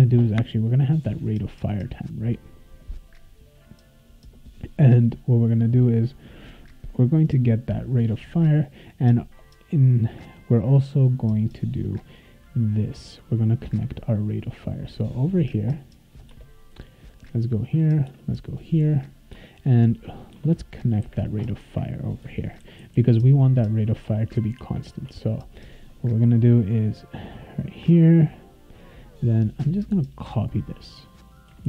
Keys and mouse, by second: 8.5 click, 8.7 click, 11.1 click, 15.3 click, 16.3 Return, 17.6 click, 18.1 Return, 18.9 click, 19.3 Return, 20.3 Return, 21.6 Tab, 22.4-23.4 typing, 24.0 Tab, 24.6 space, 24.9 =, 25.0 space, 30.3-31.5 drag.